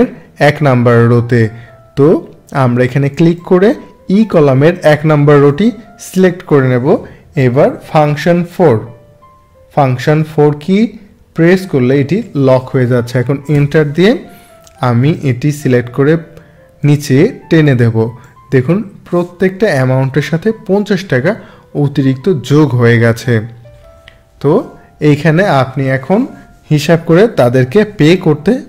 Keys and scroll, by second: 11.4 F4, 13.5 Return.